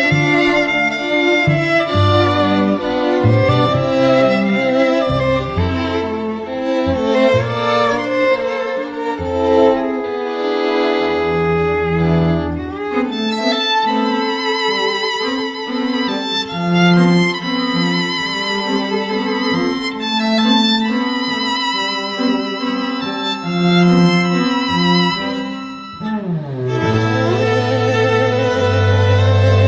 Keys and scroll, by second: 19.4 i, 20.2 ], 20.5 ], 28.2 [.